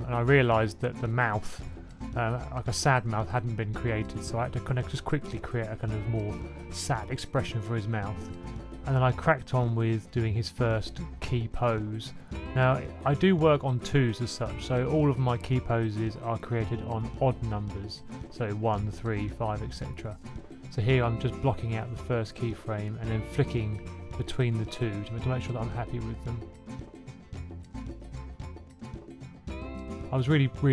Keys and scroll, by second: 0.2 typing, 2.2 Right, 4.0-4.4 typing, 4.5 super+a, 5.5 super+z, 6.9 2, 8.1 1, 8.2 1, 10.2 1, 10.2 1, 10.6 1, 11.8 F6, 12.0-13.5 typing, 15.0 b, 16.8 alt+Up, 17.9 Left, 18.2 typing, 20.6 super+c, 23.9 F6, 25.4 F6.